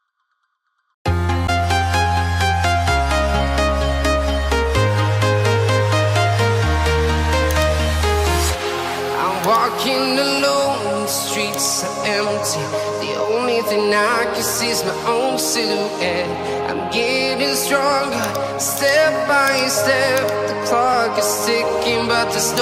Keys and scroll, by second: 10.4 ctrl+z, 12.6 ctrl+z.